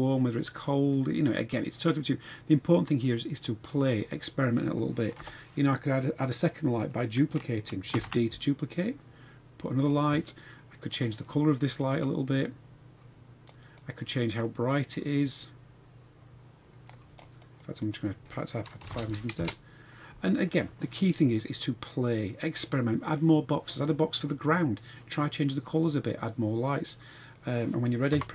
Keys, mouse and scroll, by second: 5.2 KP_7, 8.0 shift+d, 10.9 click, 14.4-17.2 drag, 17.9-19.4 drag, 19.0 KP_0, 21.2-22.6 middle drag, 22.6-23.1 scroll down 1, 25.6-27.4 middle drag.